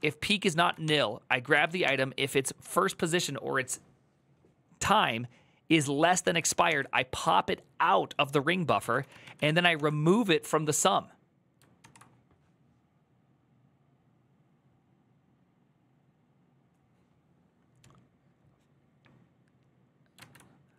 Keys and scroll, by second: 0.0-1.4 typing, 0.2 ctrl+c, 1.3 ctrl+c, 6.0-7.0 typing, 8.5-9.5 typing, 11.5 ctrl+c, 20.0 alt++.